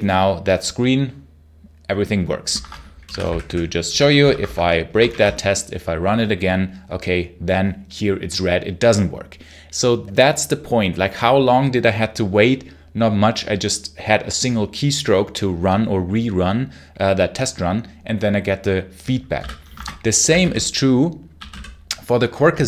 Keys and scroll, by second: 2.4 shift+Escape, 2.7-4.6 typing, 4.9 ctrl+shift+F10, 19.2 x, 19.6 shift+Escape, 20.3 h, 21.2 super+q, 21.4 h.